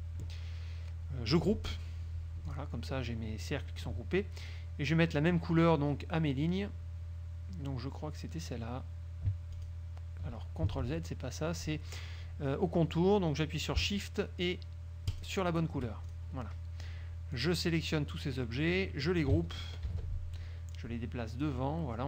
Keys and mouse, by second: 2.6 click, 4.6 click, 9.7 ctrl+click, 10.9 ctrl+z, 15.2 shift+click, 16.2 shift+click, 17.5 click, 18.6 click, 20.0 ctrl+g, 20.9-22.0 drag.